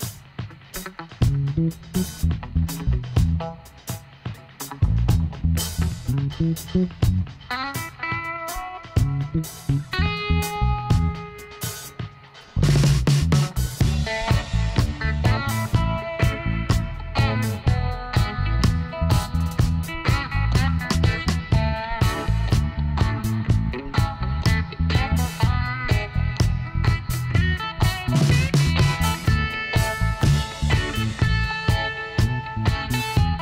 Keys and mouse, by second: 0.1 right click, 0.7 click, 1.8 middle click, 2.4-4.2 drag, 4.5 s, 8.3 click, 9.3-11.0 middle drag, 11.0-12.0 drag, 12.5-16.2 middle drag, 16.2-17.9 drag, 16.8-19.7 right drag, 18.9-22.5 drag, 21.1 ctrl+z, 21.8 ctrl+z, 22.2 ctrl+z, 22.9 ctrl+z, 25.0-26.2 drag, 26.2-27.8 right drag, 27.0 e, 28.9-30.3 drag, 29.8 right click, 31.4 click, 33.1-33.4 middle drag.